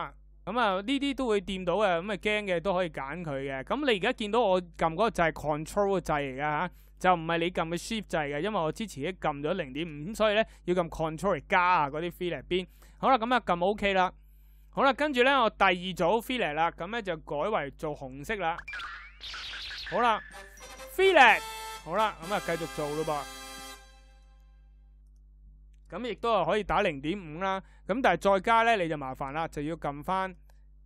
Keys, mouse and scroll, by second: 5.7-10.6 ctrl+drag, 30.4-30.8 ctrl+drag.